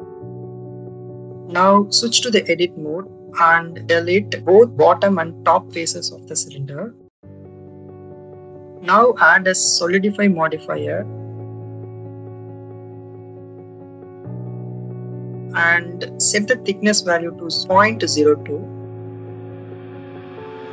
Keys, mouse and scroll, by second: 1.5 shift+click, 2.0 Tab, 2.6 click, 3.6 Delete, 5.0 shift+middle click, 5.5 middle click, 6.2 click, 6.3 Delete, 8.9 a, 9.6-11.1 drag, 16.0 click, 17.1 click.